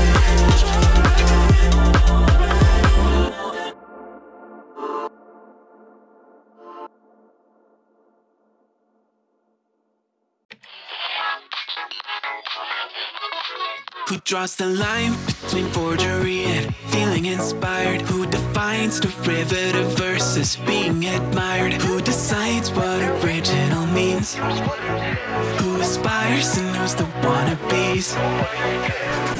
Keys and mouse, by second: 1.4 click, 2.4 click, 2.7 shift+click, 3.4-4.8 drag, 5.1 click, 5.8 click, 6.9-9.3 drag, 9.4 click, 11.6 click, 12.7 click, 13.7 click, 14.4 g, 15.5 click, 15.7 g, 16.9 2, 17.0 click, 18.0 g, 19.2-20.6 drag, 20.9 1, 21.1 click, 21.4 g, 23.3 click, 23.8 g, 24.8 click, 25.1 g, 26.3 `, 27.0 `, 28.7 z.